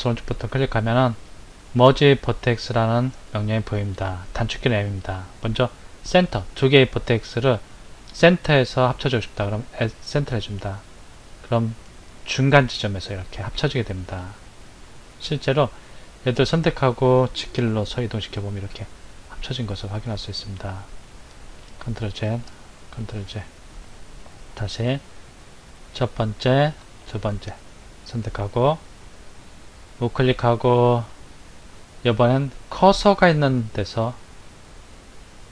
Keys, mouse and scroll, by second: 0.1 right click, 15.0 click, 16.3 click, 17.6 g, 21.6 ctrl+z, 22.3 ctrl+z, 23.1 ctrl+z, 24.2 click, 25.1 click, 26.8 shift+click, 29.7 right click.